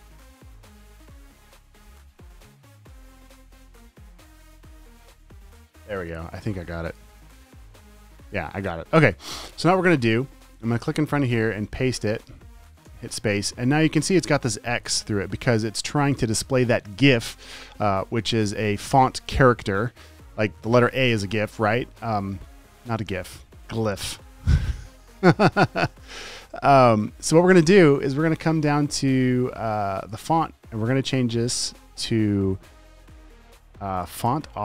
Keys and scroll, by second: 5.7 super+c, 7.8 super+v, 8.8 v, 9.2 BackSpace, 10.0 t, 12.0 super+v, 13.2 space, 34.2-34.6 typing.